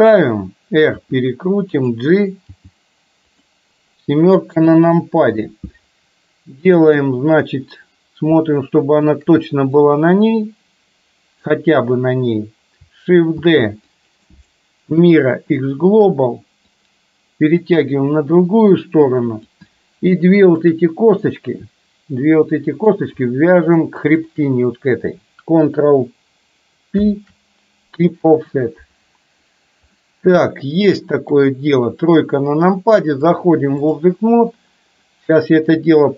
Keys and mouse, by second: 1.1 r, 2.6 g, 4.6 KP_7, 8.5 shift+middle click, 10.0-11.5 drag, 13.4 shift+d, 14.4-16.0 right drag, 16.8-19.6 drag, 20.6 shift+click, 21.3-23.0 middle drag, 24.1 shift+click, 27.1 ctrl+p, 30.0 middle click, 31.4 KP_3, 33.4 click, 35.9-36.1 drag.